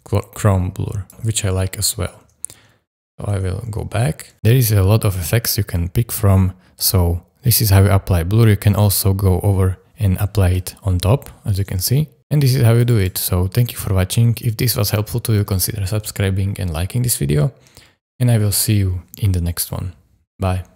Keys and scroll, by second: 2.2 super+z, 3.6 super+z, 11.7 space.